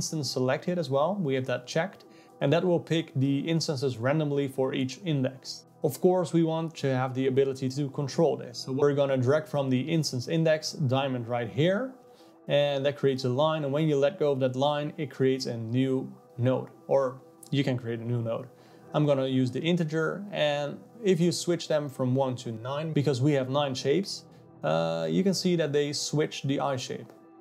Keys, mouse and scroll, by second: 0.1 click, 0.4 click, 2.7 click, 6.5 click, 6.9 click, 7.6 click, 7.9 click, 11.5 click, 20.9-27.4 drag.